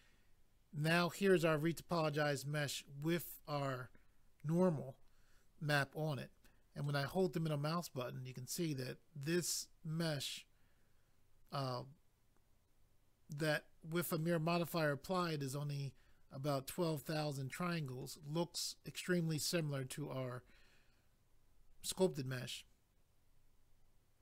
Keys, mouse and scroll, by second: 6.8 middle click, 15.2 middle click.